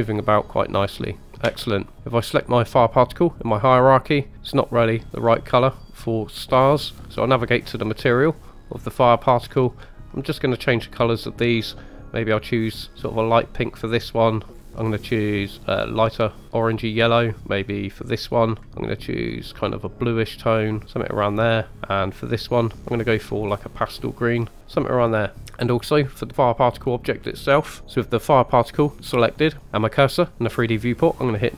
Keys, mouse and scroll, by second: 1.5 space, 3.4 click, 3.6 typing, 4.3 click, 5.4 scroll up 1, 5.7 middle click, 7.0 scroll down 3, 9.5-10.1 scroll up 3, 10.1 middle click, 11.1 click, 11.6 click, 14.5-14.9 drag, 18.0 click, 22.2-22.9 drag, 26.0 click.